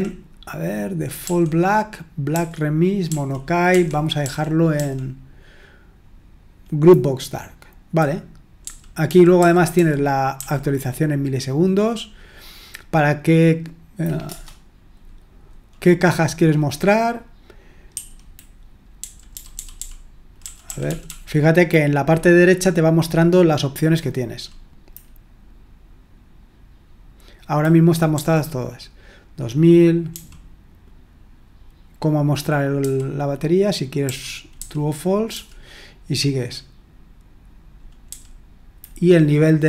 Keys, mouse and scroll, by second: 1.2 Right, 2.3 Right, 3.0 Right, 3.7 Right, 4.2 Right, 9.0 Down, 9.3 Down, 9.7 Down, 10.3 Up, 14.2 Return, 17.9 Escape, 18.9 Down, 19.3 Down, 19.5 Down, 19.7 Down, 20.4 Up, 20.6 Up, 20.8 Up, 21.1 Up, 28.1 Down, 30.1 Down, 34.5 Down, 35.3 Down, 38.0 Down.